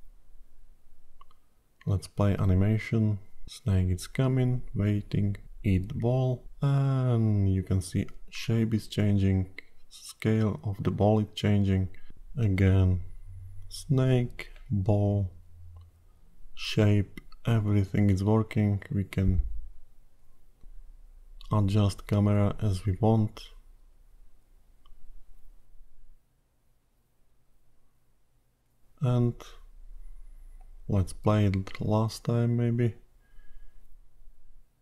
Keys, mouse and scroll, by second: 0.8 click, 11.2 click, 13.8 click, 14.7 click, 23.7 g, 31.9 click, 32.7 click.